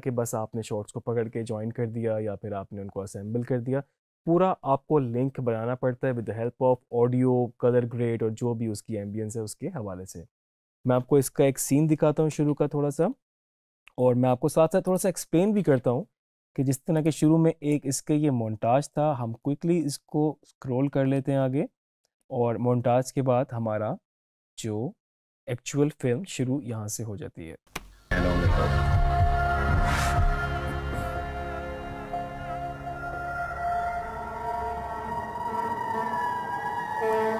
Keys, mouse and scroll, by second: 12.4 Home, 12.8 =, 14.9 click, 17.0-24.7 drag, 27.8 space.